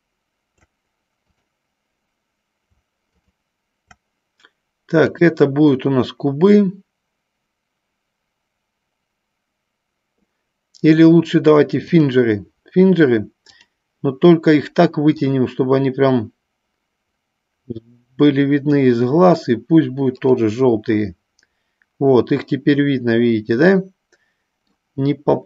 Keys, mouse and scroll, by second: 1.4 click, 5.1-12.2 drag, 13.6 click, 15.2-19.3 drag, 20.5 click, 21.2-25.0 middle drag.